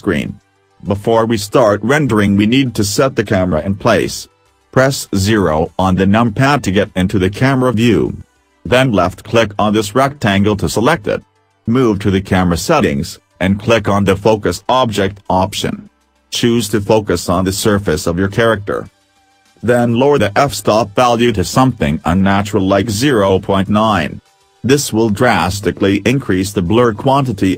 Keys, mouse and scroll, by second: 5.2 KP_0.